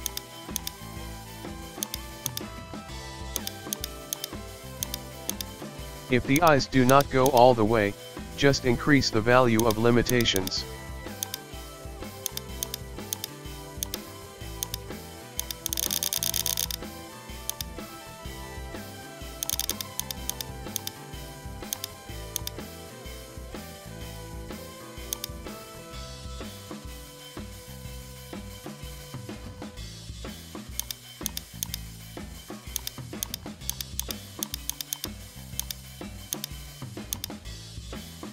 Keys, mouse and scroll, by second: 0.0 click, 0.9 shift+middle click, 1.3-1.9 scroll, 1.4 shift+middle click, 1.9 right click, 2.3 click, 3.4 click, 4.1 click, 5.3 click, 5.7-6.3 scroll down 1, 6.3 click, 6.9 right click, 7.3 click, 9.6 right click, 10.1 click, 12.6 click, 14.6 right click, 15.4-17.4 drag, 17.5 click, 19.4-20.8 drag, 21.1 scroll down 1, 21.3 KP_1, 21.7 right click, 21.9 shift+middle click, 22.1 scroll down 1, 22.4 click, 25.6 alt+g, 26.3-27.1 shift+middle drag, 27.1 KP_1, 27.4-28.2 scroll down 1, 29.5 shift+middle drag, 29.7 scroll up 1, 29.9-30.8 middle drag, 30.8 right click, 31.3 right click, 31.6 right click, 32.1 g, 33.2 right click, 33.7 right click, 34.0 Right, 34.0 right click, 34.4 Right, 34.4 right click, 34.7 Right, 34.7 right click, 35.0 Right, 35.2 g, 36.3 Left, 37.8-38.3 middle drag.